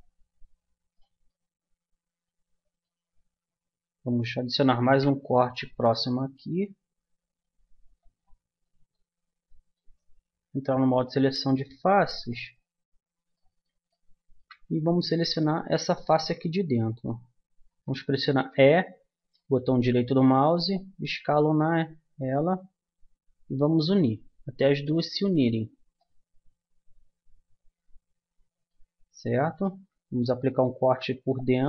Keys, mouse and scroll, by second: 4.8 ctrl+r, 11.3 click, 12.1 middle click, 12.3 click, 12.7-14.1 middle drag, 15.9-17.6 middle drag, 17.8 click, 18.4 e, 20.7-22.5 drag, 25.5-27.6 middle drag, 29.3-31.3 middle drag, 30.8 ctrl+r.